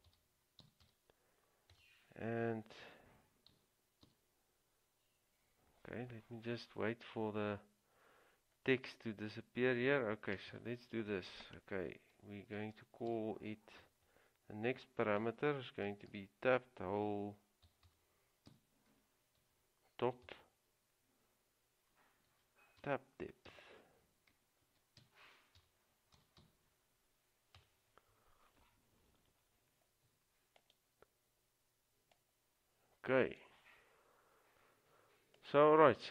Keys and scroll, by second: 0.0-1.9 typing, 3.7-4.2 typing, 13.0-13.8 typing, 16.3-20.9 typing, 22.4-23.6 typing, 24.8-28.2 typing.